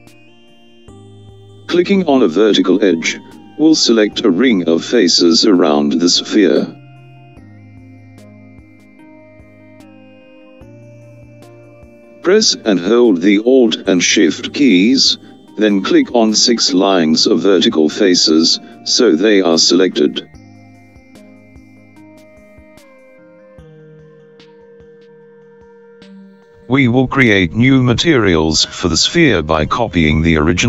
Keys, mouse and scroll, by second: 3.2-7.2 alt+drag, 16.0 alt+shift+click, 18.0 alt+shift+click, 20.6 alt+shift+click, 22.1 alt+shift+click, 23.9 alt+shift+click, 26.6 alt+shift+click.